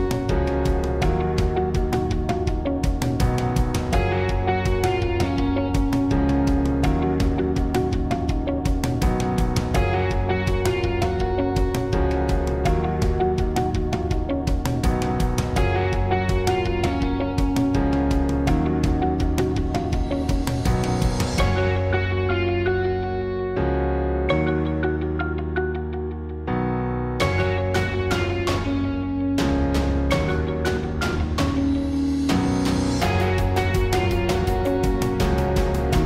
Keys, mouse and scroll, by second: 0.0-1.0 drag, 1.0 z, 2.6 z, 3.4 ctrl+r, 5.4 ctrl+r, 6.2 ctrl+r, 7.2 z, 8.2 ctrl+r, 10.0 ctrl+r, 10.1 KP_1, 10.4 KP_3, 11.4-12.8 middle drag, 12.8 click, 13.1-15.0 drag, 14.6 Tab, 15.6-17.4 drag, 18.2 KP_1, 18.8 Tab, 18.8 click, 19.0 KP_1, 19.2 Tab, 19.8 Tab, 20.2 Tab, 20.4 z, 21.7 Tab, 21.7 z, 22.0 Tab, 23.2 click, 23.7 Tab, 24.4 Tab, 27.4 Tab, 27.8 middle click, 28.4 middle click, 28.9 Tab, 28.9 z, 29.2 z, 29.6 Tab, 29.6 z, 30.4 Tab, 33.8 z, 34.7-36.0 drag.